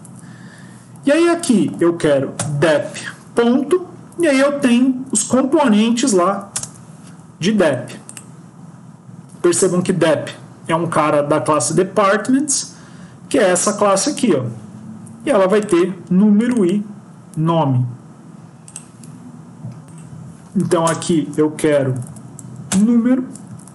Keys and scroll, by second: 4.9 Escape, 6.4 ctrl+space, 20.8 ctrl+space, 21.7 Down, 21.8 Down, 21.9 Down, 22.6 Return, 23.6 ctrl+Right.